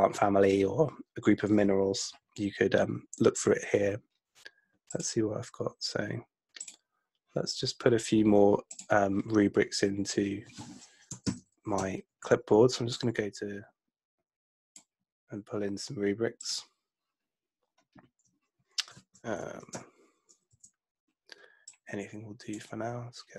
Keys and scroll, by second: 11.3 super+Left, 19.4 super+Left, 20.6 Down.